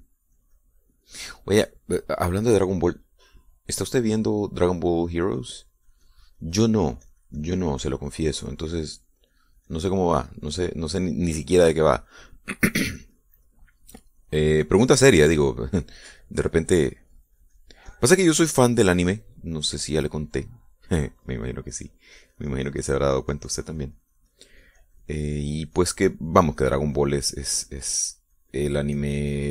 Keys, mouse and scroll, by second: 2.4 middle click, 4.2 click, 6.1-9.7 drag, 9.8-13.4 drag, 14.1-19.7 drag, 21.0 click, 23.0 click, 23.3-29.5 drag.